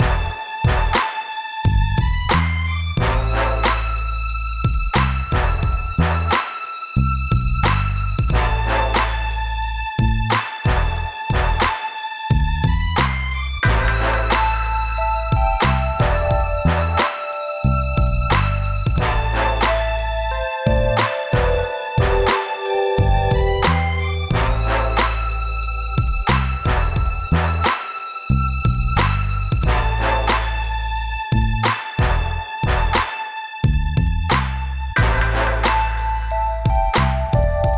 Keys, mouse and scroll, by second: 1.3 scroll up 2, 2.0 click, 3.5 scroll down 2, 4.2 scroll up 2, 7.3 scroll down 2, 7.8 scroll up 2, 11.8 click, 12.4 click, 12.9 click, 15.6 click, 17.3 scroll up 2, 18.1 right click, 18.3 scroll up 1, 18.4 right click, 20.0 click, 21.0 click, 21.9 click, 22.4 click, 22.5 double click, 23.2 double click, 23.3 double click, 24.3 click, 24.4 click, 24.7 click, 25.4 click, 27.2 click, 28.4 click, 29.2 click, 31.4 click, 31.5 click, 32.0 scroll down 2, 32.5 click, 32.6 scroll down 1, 35.8 scroll up 2, 36.1 click.